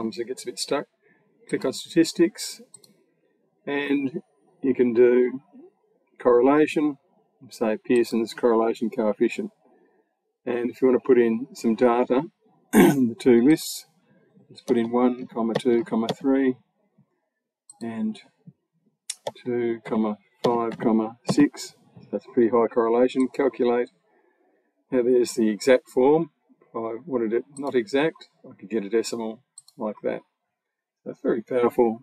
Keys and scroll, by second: 14.5 1, 15.4 2, 15.9 3, 19.1 2, 20.3 5, 21.1 6.